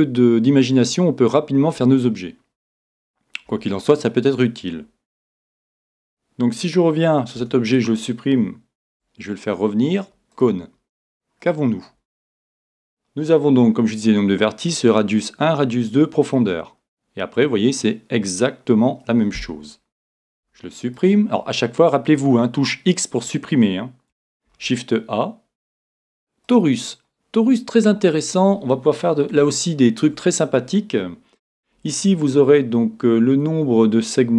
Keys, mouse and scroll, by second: 3.5 x, 5.4-7.2 right drag, 7.4 x, 8.9 shift+a, 11.4-13.2 middle drag, 13.2-15.4 scroll up 1, 16.5-18.1 scroll down 1, 18.1-21.0 middle drag, 20.4 x, 24.5 shift+a, 27.1-28.9 scroll up 1, 28.9 scroll up 1, 29.5-31.4 middle drag, 31.5-32.4 scroll up 1, 32.4-33.6 middle drag, 34.1-34.3 drag.